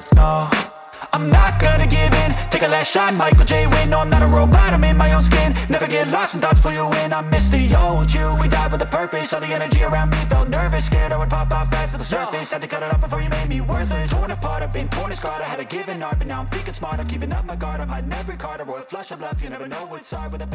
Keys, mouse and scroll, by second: 0.0-0.8 typing, 9.1 ctrl+shift+s, 12.3 double click.